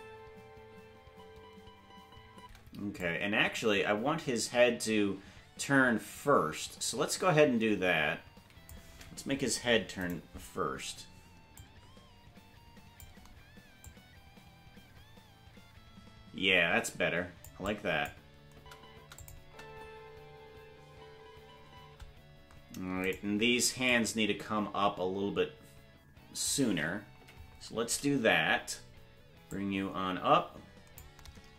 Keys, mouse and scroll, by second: 3.0-8.7 drag, 3.0 space, 9.6 Left, 10.1 right click, 11.5-13.0 drag, 13.8-17.4 drag, 17.6 click, 18.5 space, 19.2 click, 19.2 space, 19.4 space, 22.7 space, 23.1 right click, 23.9-26.5 drag, 27.2 Left, 29.5-31.0 drag.